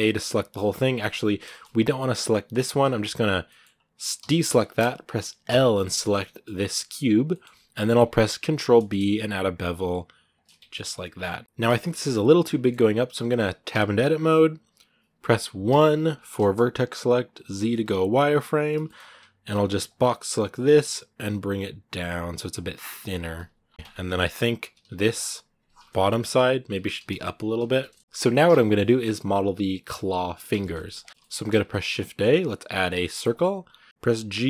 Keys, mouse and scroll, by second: 0.3 scroll up 1, 0.4-2.6 middle drag, 2.6 a, 3.3 middle click, 3.5-4.0 scroll up 1, 4.0 a, 5.6-6.9 middle drag, 6.9 scroll up 1, 7.1-8.2 middle drag, 8.2 ctrl+b, 10.9-11.4 scroll down 3, 11.0 middle click, 11.6 shift+middle click, 11.8-12.4 scroll up 1, 12.4-13.5 shift+middle drag, 13.5 Tab, 18.6 shift+middle click, 18.9 a, 22.9-23.5 scroll down 3, 23.3 z, 23.6 Tab, 23.7 scroll up 5, 23.9 shift+middle click, 24.5 z, 25.8 KP_Decimal, 26.3 scroll down 3, 26.5 g, 28.0-31.0 shift+middle drag, 31.0 scroll down 2, 31.1-33.1 shift+middle drag, 33.1 shift+a, 33.4 scroll down 2, 33.9 g.